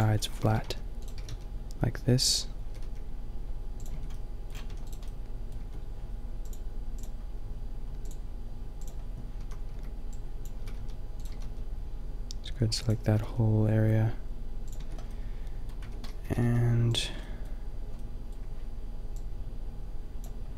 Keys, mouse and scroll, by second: 0.0-1.2 typing, 2.3-4.3 drag, 2.7 g, 3.9 Tab, 4.7 a, 5.6 Tab, 7.0 Tab, 7.0 a, 8.8 Tab, 9.4 a, 9.8 b, 10.6 s, 11.3 s, 12.9-14.8 drag, 13.1 g, 14.8 Tab, 15.8 Tab, 16.2 g, 17.0 Tab, 19.2 click, 20.2 Tab.